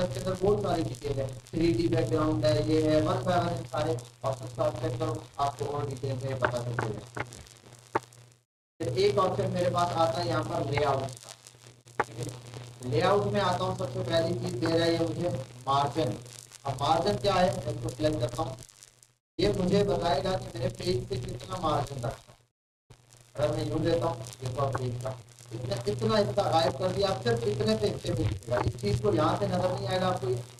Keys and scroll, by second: 28.4 ctrl+z.